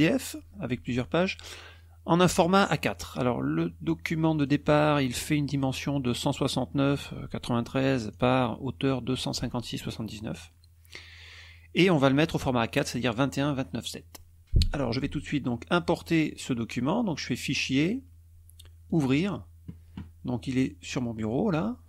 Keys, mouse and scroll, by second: 4.3 click, 6.1 click, 7.8 click, 13.1 click, 14.7 click, 17.5 click, 18.8 click, 20.5 click, 21.1 click.